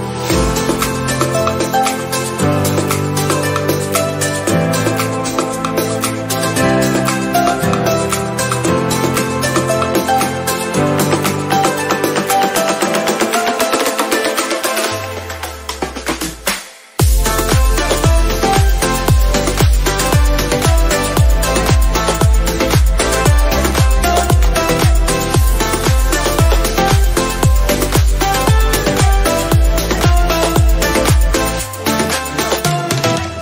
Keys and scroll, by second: 6.9 ctrl+0, 8.3 ctrl+s.